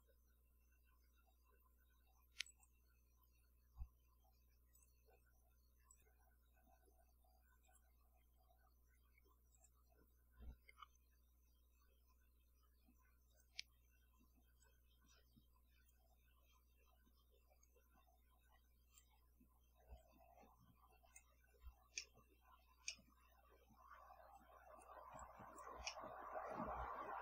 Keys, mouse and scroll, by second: 2.5 click, 4.7 click, 5.9 click, 7.7 click, 9.5 click, 13.3 click, 14.6-16.1 drag, 17.6-19.2 drag, 20.0-21.3 drag, 22.6 scroll up 2, 24.3-25.0 drag, 25.2-25.8 drag, 25.8 scroll up 1, 25.9-26.6 middle drag.